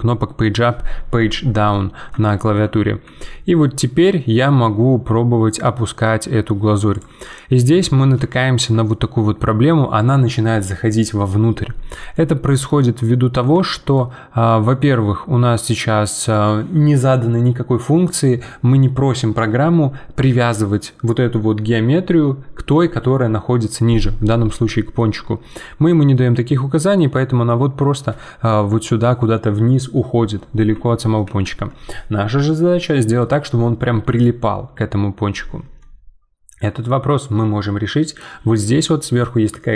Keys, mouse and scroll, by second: 1.7-3.0 middle drag, 3.0 g, 7.2-11.9 middle drag, 12.1-18.0 middle drag, 24.3-28.5 middle drag, 31.2 ctrl+z, 35.8-38.9 middle drag.